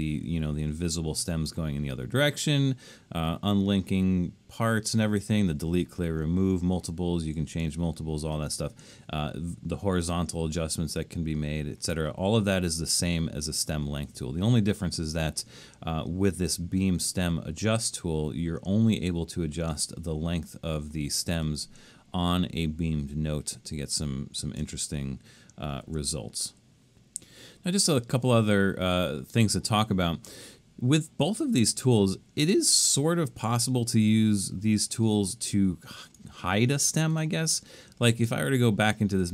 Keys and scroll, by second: 12.7 super+z, 25.5 super+z.